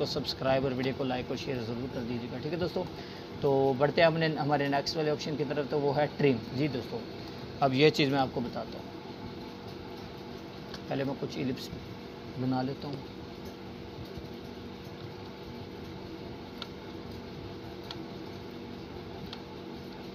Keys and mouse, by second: 0.2-1.7 alt+shift+drag, 1.6 click, 3.1-3.4 click, 7.2 click, 10.7-11.6 alt+shift+drag, 13.6-15.1 alt+drag, 16.2-17.4 alt+drag, 17.9-18.8 alt+drag.